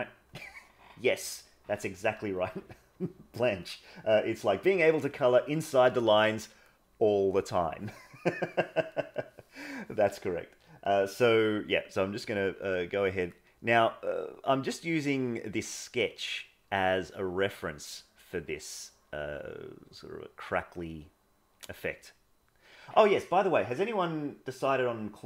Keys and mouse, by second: 6.9 click, 12.1-13.2 drag, 13.4 click, 14.4-15.5 drag, 16.0 click, 17.0 click, 17.8 click, 18.8 click, 19.7 click, 20.8 click, 22.0 click.